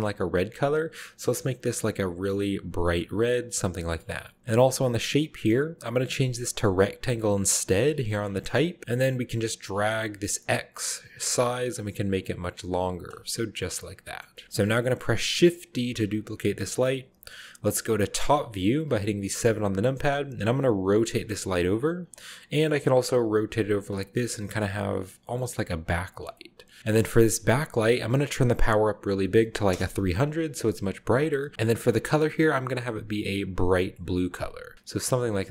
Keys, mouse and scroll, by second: 1.7-3.6 drag, 3.8-4.4 scroll down 1, 4.2 middle drag, 5.0 click, 6.7-7.7 drag, 8.2 click, 8.8 middle click, 8.8-9.5 scroll down 1, 9.7-13.0 drag, 13.2-15.3 middle drag, 13.2-15.2 scroll down 2, 15.8 shift+d, 16.7-17.7 shift+middle drag, 18.8 KP_7, 20.4 r, 21.5 click, 21.7 g, 22.3 middle click, 23.0-24.2 typing, 24.7-25.2 middle drag, 25.6-26.8 typing, 25.8-26.8 middle drag, 27.2 shift+middle click, 29.1 typing, 29.7 Return, 30.4-31.4 scroll down 1, 30.5 middle click, 30.7 g, 31.5 click, 32.4-33.7 drag, 34.0-34.7 scroll up 1, 35.2-35.5 scroll down 1.